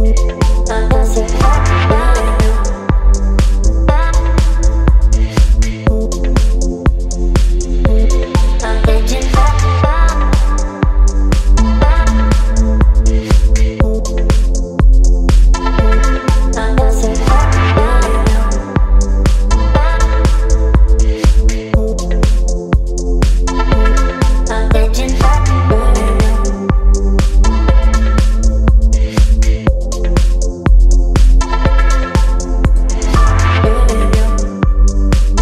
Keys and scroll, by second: 10.0 BackSpace, 17.0 Return, 24.6 space, 26.0 v, 28.9 ctrl+t, 33.3 Return.